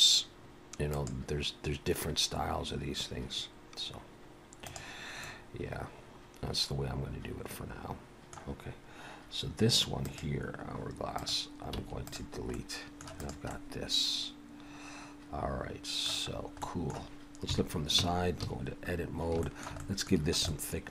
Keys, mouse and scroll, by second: 5.2 middle click, 10.0 click, 11.2 click, 11.8 x, 12.5 middle click, 13.2 click, 13.5 middle click, 16.3 scroll up 1, 16.6 middle click, 17.5 KP_3, 18.0 Tab, 18.4 a, 18.9-19.3 scroll up 1, 19.4 shift+middle click, 19.8 middle click.